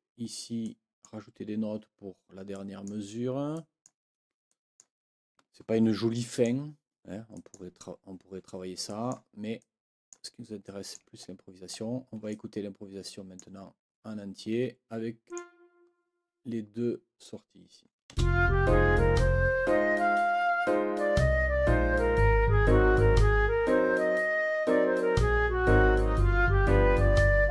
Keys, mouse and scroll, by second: 0.6 click, 2.5 click, 3.5 click, 4.5 click, 4.7 click, 6.1-6.6 scroll up 2, 7.3-7.7 scroll up 2, 8.9-9.3 scroll up 2, 9.6 click, 10.6 click, 11.7 ctrl+scroll down 2, 12.3 ctrl+click, 12.5-13.1 ctrl+scroll up 2, 15.3 click, 18.1 space.